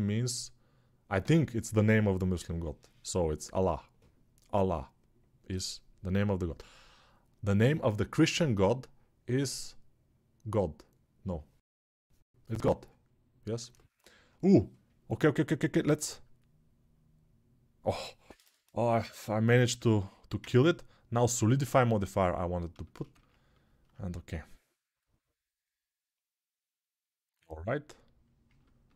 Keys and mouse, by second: 18.8 middle click, 19.7-28.9 drag.